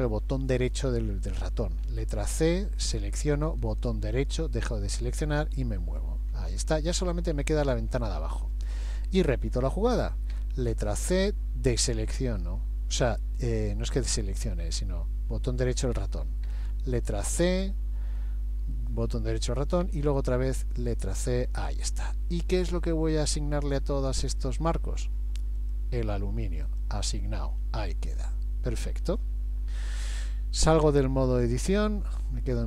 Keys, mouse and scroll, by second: 1.9 c, 5.0 middle click, 6.3-6.7 scroll down 1, 6.8 shift+middle click, 6.8-7.1 scroll down 2, 8.1 middle click, 8.7-9.1 scroll up 2, 10.3 c, 11.8 middle click, 16.5 c, 18.2 middle click, 19.8 c, 21.8-22.6 scroll down 2, 22.6 middle click, 22.6 scroll down 1, 23.6-24.0 scroll down 1, 24.2 middle click, 25.6 click, 26.7 click, 27.6-28.0 scroll down 1, 29.8-30.6 scroll down 2, 31.8 click.